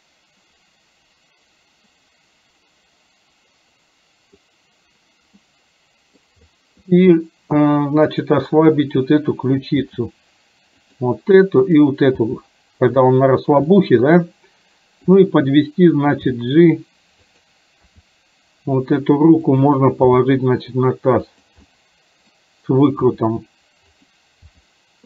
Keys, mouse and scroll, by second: 0.0-4.5 middle drag, 5.5-6.2 middle drag, 5.5 scroll up 1, 6.6 middle click, 8.2 click, 10.0 r, 12.4 r, 13.9 middle click, 15.1 click, 16.4 g, 17.9 r, 20.1 g, 21.6-22.0 scroll up 1, 22.0 middle click, 22.4 scroll down 1, 23.2 r, 24.5 g.